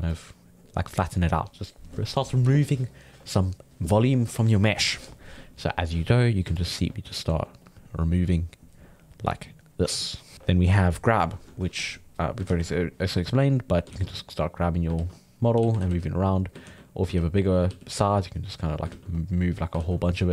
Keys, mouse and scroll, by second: 0.1-3.3 drag, 5.8-7.6 ctrl+middle drag, 7.6-10.4 drag, 10.4 middle click, 10.8-12.5 drag, 12.5 ctrl+z, 12.7-13.9 drag, 13.9 ctrl+z, 14.1 click, 15.0 ctrl+z, 15.1 click, 15.5 f, 16.3 click, 16.7 ctrl+z, 17.1 f, 17.4 ctrl+middle click, 17.7 f, 18.2 click, 18.9 ctrl+z, 19.2 click, 19.8 ctrl+z, 20.0 click.